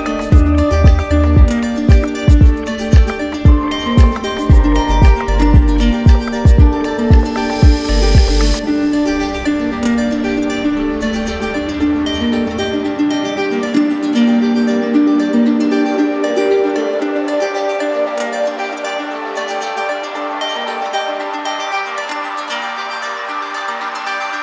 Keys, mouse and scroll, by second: 0.5 click, 1.6 shift+click, 2.5 right click, 3.4 right click, 5.0 right click, 7.3 right click, 8.0 shift+right click, 8.1 shift+right click, 11.1 right click, 12.8 shift+right click, 13.7 alt+right click, 16.4 right click, 19.5 right click, 19.7 ctrl+z, 20.3 ctrl+z, 22.7 click, 23.7 click.